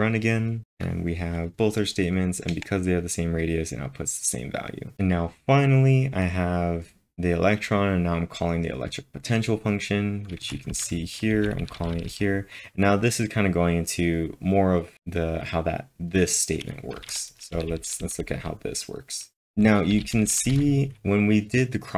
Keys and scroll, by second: 10.5-12.1 typing, 17.0-20.5 typing.